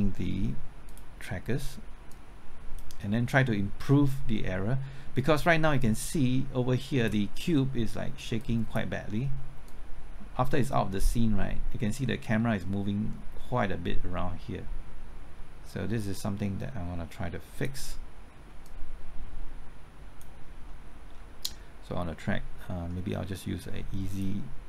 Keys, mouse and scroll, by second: 0.8-20.4 drag, 24.1 click.